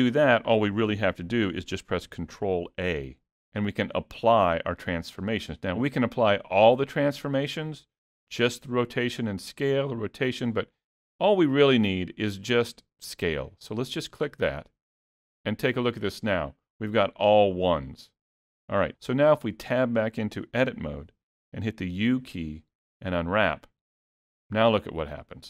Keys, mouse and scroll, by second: 2.7 ctrl+a, 19.7 Tab, 21.9 u.